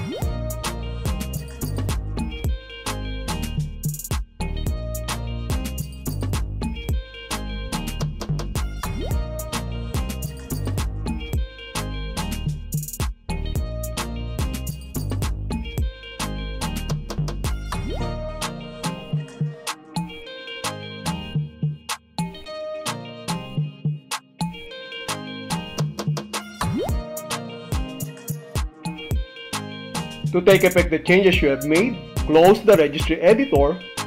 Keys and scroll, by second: 1.1 l, 3.1 l, 5.1 Return, 12.1 Return, 14.1 l, 16.1 Return, 28.1 Return.